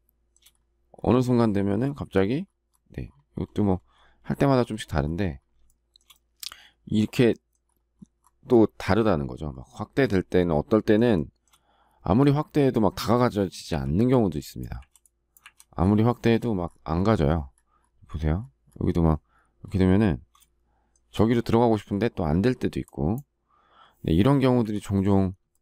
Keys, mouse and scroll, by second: 5.6 shift+middle click, 11.1 shift+middle click, 13.7 Delete, 20.3 shift+middle click, 24.6 Delete, 25.5 shift+middle click.